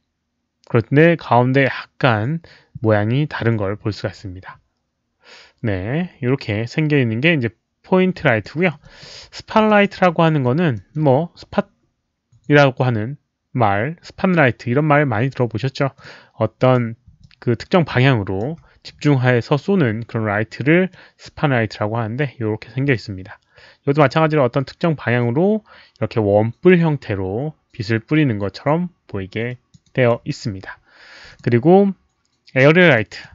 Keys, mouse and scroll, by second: 8.4 alt+middle click, 8.8 alt+click, 9.6 alt+click, 10.0 drag, 10.7 alt+middle click, 15.9 click, 16.6 click, 17.2-18.4 alt+drag, 20.9-21.2 drag, 22.9-24.1 alt+drag, 29.4 alt+drag, 29.9 alt+right click, 30.2 alt+middle click, 31.2 click, 31.4 alt+middle click, 31.4 alt+right click, 33.0 drag, 33.2 alt+middle click, 33.2 alt+right click.